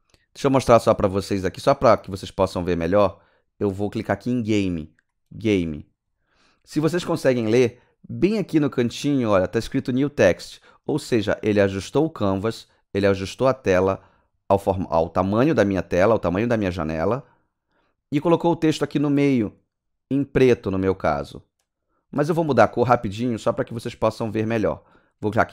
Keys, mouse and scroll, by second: 5.3 click, 21.6 click.